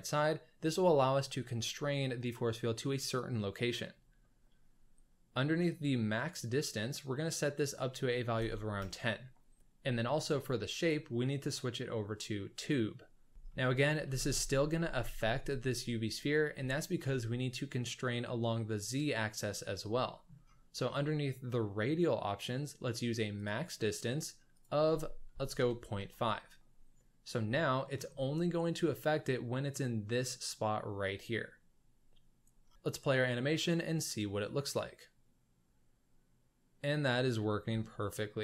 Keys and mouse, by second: 5.7 click, 7.6-8.9 drag, 10.7-12.8 drag, 13.4 shift+middle drag, 14.0 space, 14.7 space, 16.2 click, 16.7 shift+middle drag, 20.0 shift+middle drag, 23.3 click, 24.5-26.0 drag, 27.7 shift+middle drag, 32.7 space, 37.4 shift+drag.